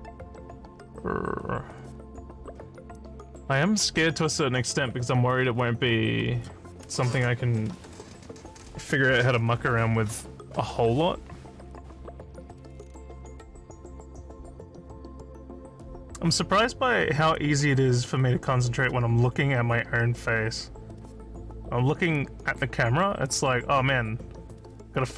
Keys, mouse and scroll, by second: 14.1 click, 15.3 click.